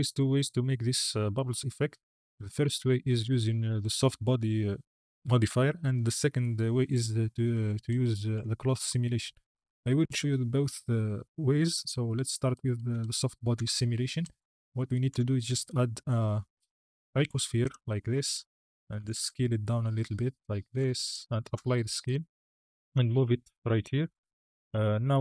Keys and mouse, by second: 13.4 KP_1, 15.0 KP_1, 15.4 shift+a, 19.2 s, 20.7 s, 21.3 ctrl+a, 22.5 g, 22.7 x.